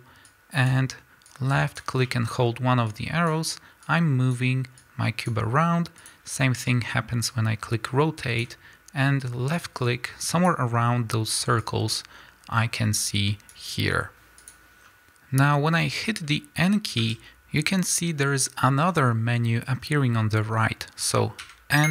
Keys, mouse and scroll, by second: 0.3-2.1 drag, 2.1-2.9 middle drag, 2.9-6.2 drag, 7.3-17.0 drag, 17.0 n, 21.5 n.